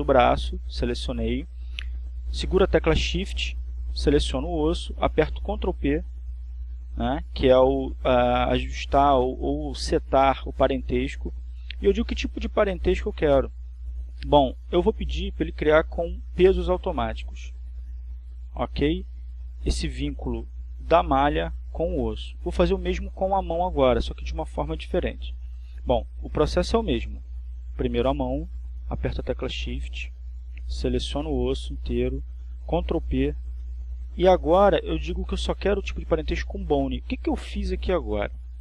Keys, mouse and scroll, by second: 21.5 click, 31.9 right click, 35.4 shift+right click, 38.0 ctrl+p.